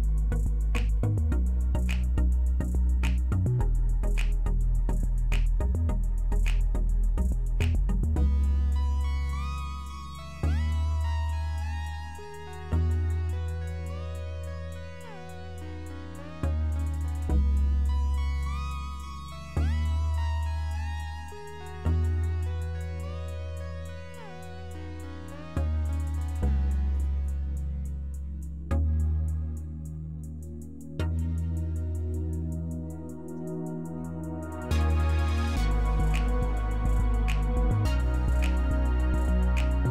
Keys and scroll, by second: 10.0-11.7 typing, 22.1 F3, 28.0 F3, 29.3 F4.